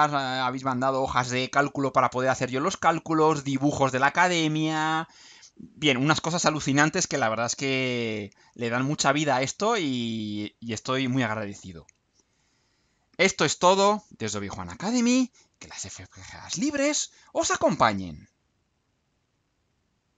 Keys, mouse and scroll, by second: 18.8 click.